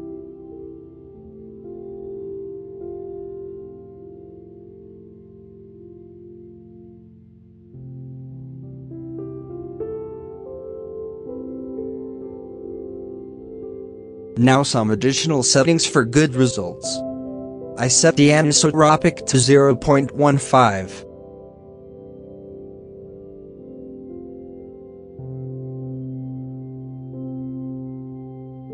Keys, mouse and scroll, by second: 0.4 middle click, 0.6 scroll up 2, 1.6 scroll down 3, 1.9-3.3 drag, 4.2 scroll up 4, 4.6-5.1 shift+middle drag, 5.1 scroll down 3, 7.2 scroll down 3, 7.8-8.8 middle drag, 8.8-9.8 scroll up 2, 8.9 middle drag, 9.8 KP_0, 10.2 z, 12.3 z, 13.9 middle click, 14.1 scroll up 4, 14.9-15.5 scroll up 1, 16.0 scroll up 3, 19.5-20.1 middle drag, 20.1-21.6 drag, 22.0 scroll up 6, 22.5-24.6 shift+middle drag, 24.6 scroll down 1, 25.3-26.3 middle drag, 26.3-28.7 drag.